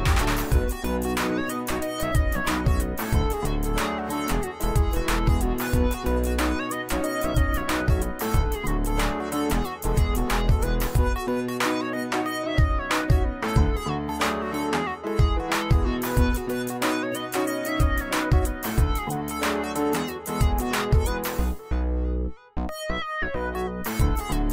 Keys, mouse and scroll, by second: 1.8 click, 6.6 right click, 9.5 click, 10.7-12.0 alt+shift+drag, 18.3 alt+shift+click, 18.3-18.9 alt+shift+drag, 20.5 click.